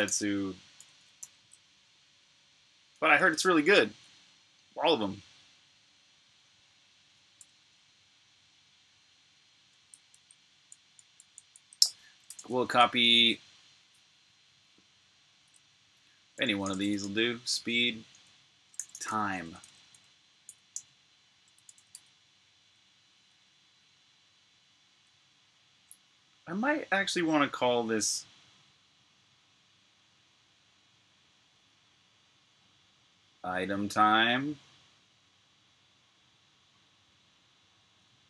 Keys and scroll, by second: 0.0-1.0 typing, 2.8 /, 7.3 Return, 11.9-12.6 typing, 15.6-19.7 typing, 21.2-21.5 typing, 23.9-24.2 Left, 23.9 typing.